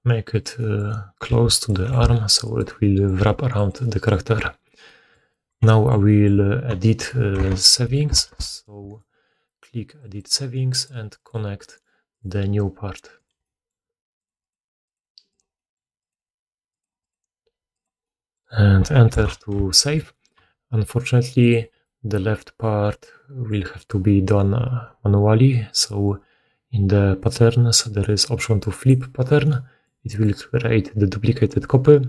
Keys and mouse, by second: 1.2 g, 1.9 r, 3.1 g, 7.4 shift+2, 8.2 2, 8.8 right click, 10.0-21.5 drag, 11.7-13.2 middle drag, 18.3-19.5 middle drag, 21.5-29.6 middle drag, 23.7 right click, 25.7-32.0 drag, 30.0-32.0 middle drag, 30.0 right click.